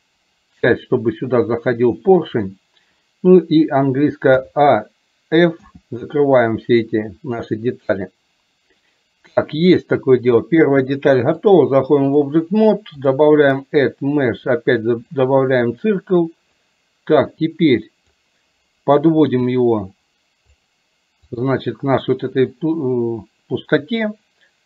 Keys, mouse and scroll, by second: 11.5 click, 13.2-15.4 drag, 16.8-18.2 drag, 20.5-21.5 drag.